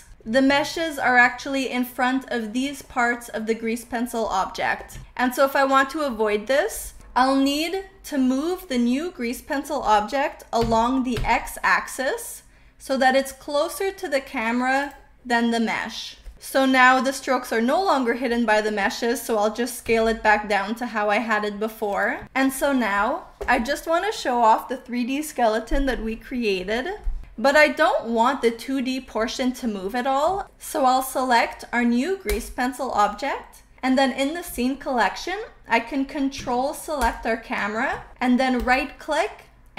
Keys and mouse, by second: 0.1 click, 0.7 shift+middle click, 1.2 middle click, 2.8-3.9 middle drag, 6.8 middle click, 8.9 middle click, 10.5 g, 11.2 x, 14.9 click, 19.9 s, 22.0 click, 32.2 click, 36.9 ctrl+click, 38.5-39.7 drag.